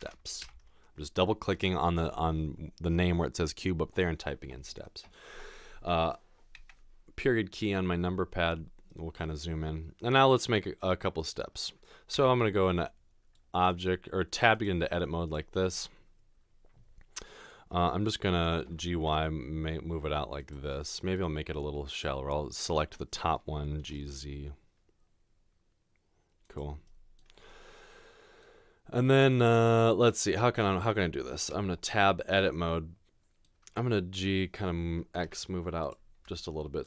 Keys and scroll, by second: 0.0-0.4 typing, 1.5 Return, 12.2 Tab, 18.7 typing, 23.9 typing, 31.6 Tab, 34.2 typing, 35.2 typing.